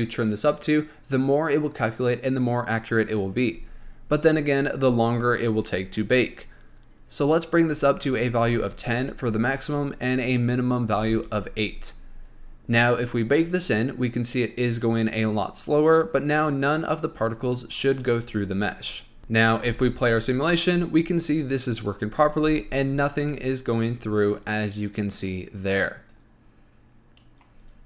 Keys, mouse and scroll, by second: 7.5-8.9 drag, 9.9-11.5 drag, 13.1-19.2 drag, 19.2-19.9 shift+middle drag, 19.9 space, 22.7 space, 23.6-26.6 drag.